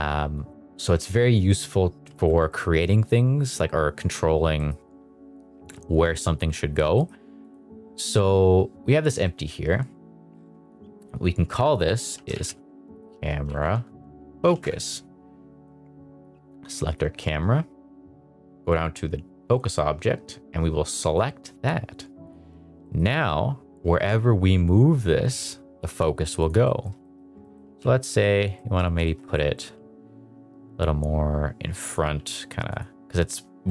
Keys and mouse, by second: 0.4 click, 1.0 shift+middle drag, 1.4 middle click, 2.1 shift+middle drag, 2.4 middle click, 4.5 middle click, 6.9 middle click, 7.4 click, 11.1-14.6 drag, 16.9 click, 22.8 middle click, 23.0 g, 26.6 middle click, 27.0 shift+middle click, 27.4 middle click, 27.9 g, 28.5 middle click, 29.0 middle drag, 29.3 middle drag, 30.7 g, 31.8 click, 32.1 g, 32.6 click.